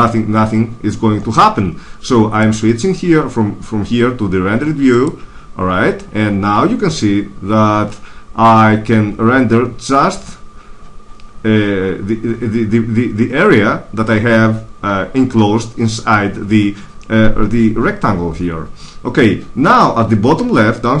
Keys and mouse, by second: 2.3-3.8 drag.